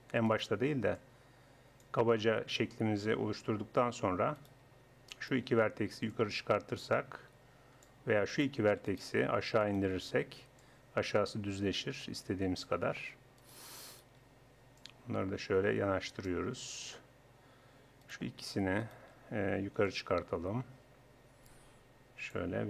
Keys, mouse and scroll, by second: 0.3-1.8 middle drag, 2.5 click, 4.4-6.1 drag, 6.1 middle click, 7.0 click, 8.3-10.6 right drag, 10.6-12.2 middle drag, 12.2 click, 13.4-16.3 right drag, 14.8-16.7 drag, 18.0-21.4 right drag, 19.9-21.8 drag.